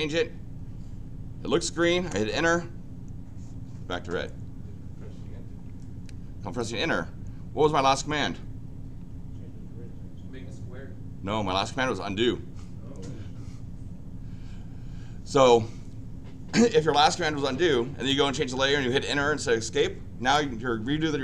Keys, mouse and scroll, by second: 2.2 Return, 6.5-7.6 drag.